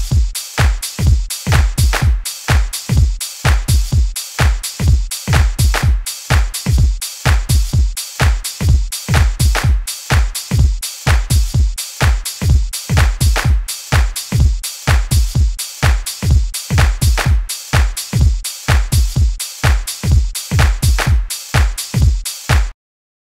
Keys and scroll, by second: 5.4 super+a, 6.1 super+u, 7.3 super+z, 12.3 super+u.